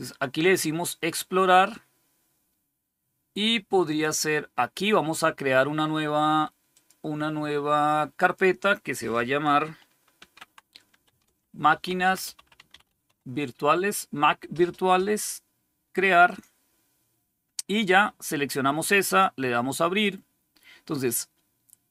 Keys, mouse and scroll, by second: 3.7 click, 6.6 click, 7.3 click, 9.8-13.5 typing, 16.2 click, 19.0 click.